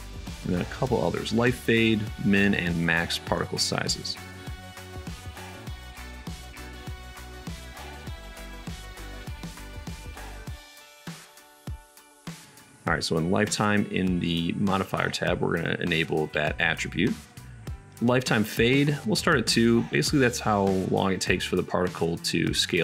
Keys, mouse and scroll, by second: 1.3-1.8 middle drag, 1.8 right click, 2.7-5.3 shift+middle drag, 5.3-6.0 right drag, 6.0 middle click, 6.5 right click, 6.8-8.7 middle drag, 8.7 right click, 9.4 middle click, 10.2 right click, 10.3-12.6 middle drag, 13.6-14.1 right drag, 14.1 middle click, 14.3-15.9 right drag, 15.9-22.8 middle drag.